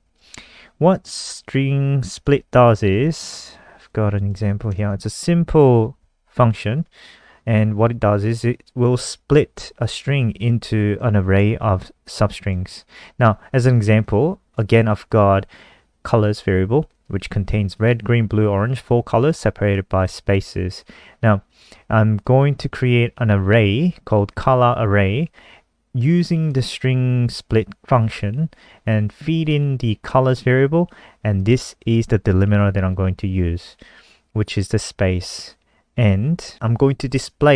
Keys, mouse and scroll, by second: 0.5 Up, 0.9 Home, 1.2 Down, 2.4 Up, 2.7 shift+End, 3.7 shift+click, 4.0 shift+click, 4.4 ctrl+c, 4.5 click, 4.9 Return, 5.1 ctrl+v, 11.2 click, 26.8 click.